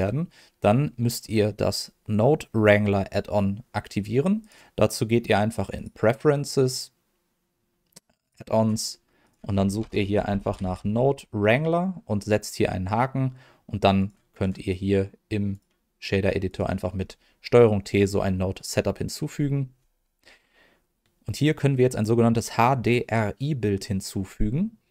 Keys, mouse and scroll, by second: 4.4-5.8 drag, 8.2 click, 9.2-14.0 drag, 14.3-15.6 drag, 16.4 click, 16.9-17.5 scroll up 2, 17.5-19.5 scroll down 1.